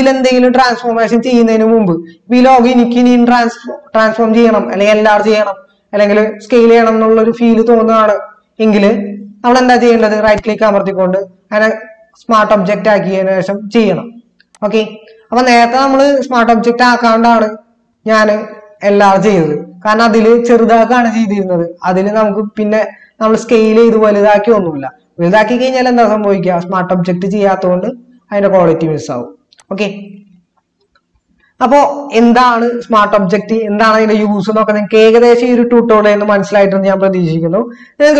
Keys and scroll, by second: 18.9 ctrl+t.